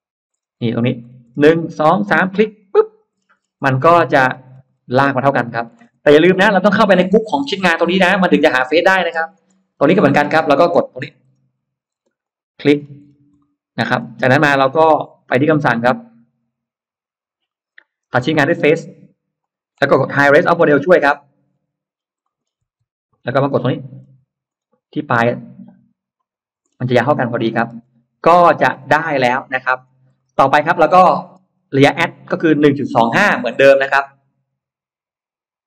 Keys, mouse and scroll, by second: 2.4 click, 3.0-4.7 scroll down 6, 5.0 middle click, 7.1 n, 8.9-9.2 scroll down 2, 9.4 middle click, 9.8 middle click, 10.0-10.4 scroll down 2, 10.4-12.0 scroll up 4, 11.9 space, 12.1 click, 12.6-12.9 scroll down 1, 13.2 middle click, 13.8-14.2 scroll down 1, 14.3-14.9 scroll up 2, 19.2 click, 20.7 n, 21.5-21.8 scroll down 1, 22.1 middle click, 22.5 n, 23.0-24.1 scroll up 2, 24.4-24.7 scroll down 1, 26.0 click, 26.5-27.6 scroll down 2, 27.3 middle click, 27.6 space, 27.7 scroll up 1, 28.1 Escape, 28.4-28.8 scroll down 1, 28.6 middle click, 29.1-29.4 scroll up 1, 29.7 scroll down 1, 30.4 scroll up 2, 31.1-31.4 scroll down 2, 31.4-32.2 scroll up 4.